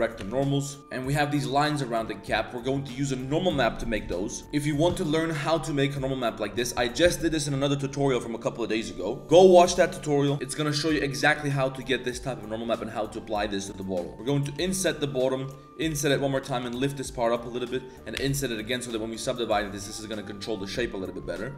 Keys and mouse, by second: 0.2 Tab, 0.3-0.8 drag, 0.8 g, 2.1 shift+drag, 14.1 Tab, 14.1 3, 14.1 z, 14.4 i, 15.9 i, 16.5 g, 18.1 i, 18.9 Tab, 19.8 Tab, 21.5 Tab.